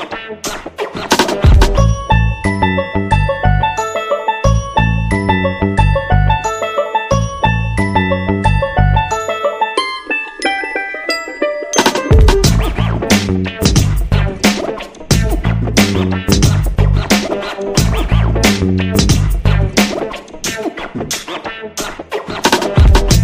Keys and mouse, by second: 0.4 shift+middle click, 1.0 middle click, 2.1 middle click, 3.1 shift+d, 3.8 KP_3, 4.6 s, 5.4 g, 6.2-6.7 middle drag, 6.9 g, 8.7 middle click, 9.7 r, 10.5 r, 11.8 middle click, 12.7 middle click, 13.4 middle click, 13.8 g, 14.9 KP_7, 16.2 shift+d, 17.4 r, 19.3 r, 20.1 g, 20.7 middle click, 21.9 g, 22.4 middle click, 23.1 r.